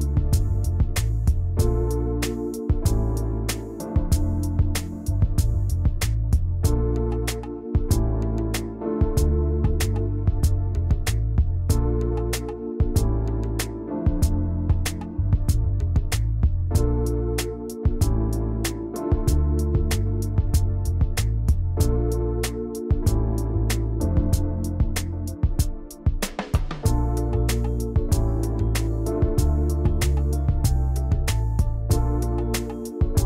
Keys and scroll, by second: 1.5 v, 27.8 v, 29.9 m, 30.8 v, 31.9 ctrl+c, 32.2 ctrl+shift+v.